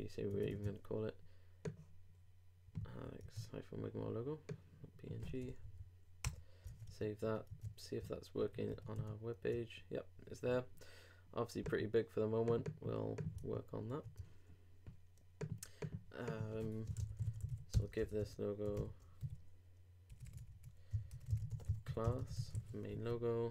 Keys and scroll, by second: 2.8 super+c, 3.2 super+Tab, 5.6 super+., 6.6 super+Return, 7.6 super+Tab, 8.4 super+2, 8.7 super+3, 8.9 super+r, 17.7 shift+=, 18.0 shift+l, 22.5 super+o.